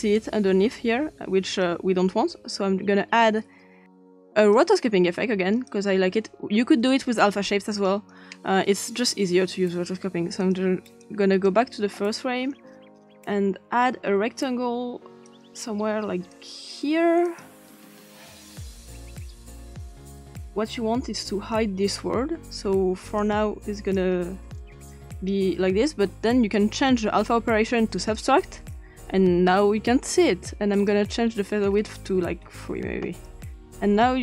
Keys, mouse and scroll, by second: 0.0-1.7 drag, 4.5 click, 5.7-6.9 drag, 7.7 click, 10.4 click, 11.0-11.5 drag, 15.3 click, 16.3 click, 17.3 click, 18.3 click, 18.6-19.8 middle drag, 19.8-21.5 drag, 23.2 click, 24.9 click, 26.5 click, 28.1 click, 30.7 click, 33.5-34.2 drag.